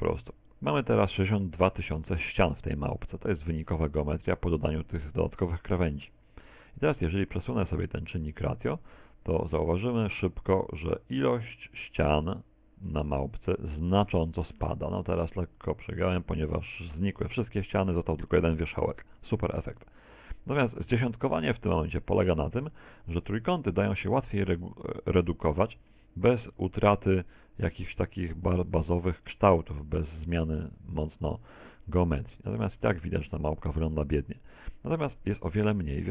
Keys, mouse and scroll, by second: 13.1 click.